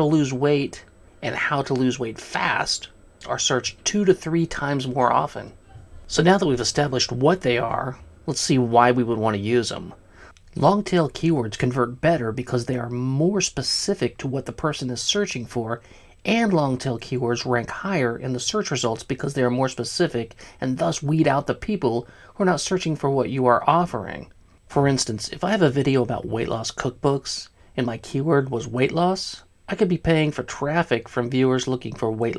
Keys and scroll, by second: 1.0 Left, 1.1 Left, 1.2 Left, 1.4 Left, 1.5 Left, 1.7 Left, 1.9 Left, 2.0 Left, 3.5 Left, 3.6 Left, 3.8 Left, 3.9 Left, 4.1 Left, 4.3 Left, 4.6-6.7 typing.